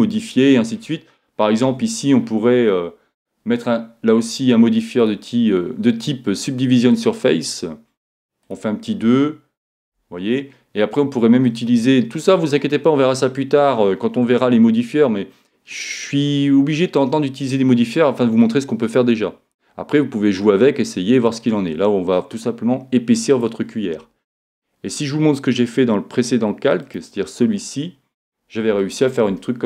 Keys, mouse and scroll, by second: 1.7 Tab, 5.0-6.8 drag, 8.4-10.3 drag, 9.1 Tab, 9.9 Tab, 11.5-13.3 drag, 21.3-23.1 drag, 26.8-28.8 drag, 28.8-29.6 middle drag.